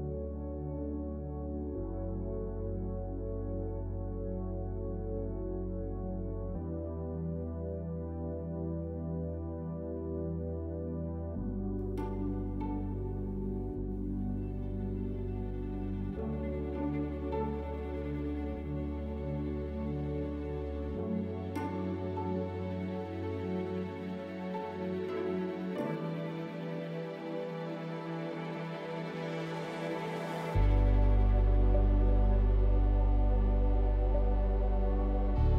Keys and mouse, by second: 0.1 click, 0.7 middle click, 4.1 middle click, 4.6 shift+click, 5.1 middle click, 6.9 shift+click, 7.3 shift+click, 8.4 shift+click, 12.2-14.2 middle drag, 14.6 middle click, 17.2 shift+click, 17.6 middle click, 18.1 middle click, 19.9 shift+click, 22.4 shift+click, 23.1 shift+click, 23.5 click, 24.1 shift+click, 25.4-26.5 drag, 28.1 click, 28.4 middle click, 28.8 shift+middle click, 29.3 middle click, 29.6 middle click, 31.5 KP_1, 33.1-35.3 shift+drag.